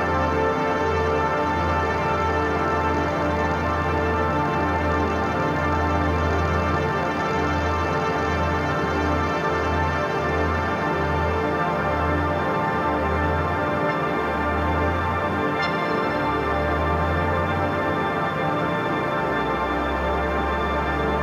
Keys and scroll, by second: 18.7 [, 19.2 ].